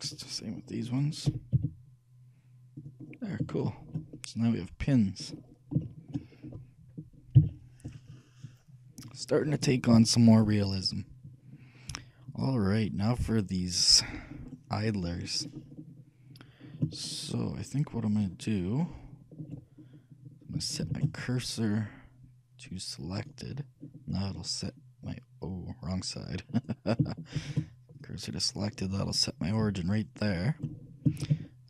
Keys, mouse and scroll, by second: 1.0-2.8 right drag, 1.4 g, 3.2-4.6 shift+middle drag, 7.5 shift+KP_3, 12.4-14.9 drag, 14.9-18.9 middle drag, 19.9 scroll up 1, 20.9 shift+s, 24.2-26.2 middle drag, 26.7-28.4 right drag, 27.5 shift+s, 28.7-30.6 middle drag, 29.7 KP_3, 31.4 shift+a.